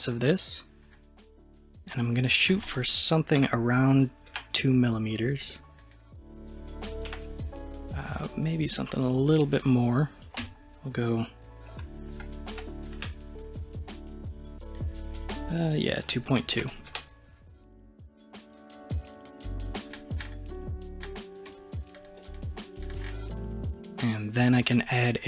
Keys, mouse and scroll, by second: 2.3-5.4 drag, 5.5-7.1 middle drag, 7.1 KP_1, 10.2-13.3 drag, 15.2-18.2 drag, 19.8-22.2 drag, 22.2-24.7 middle drag.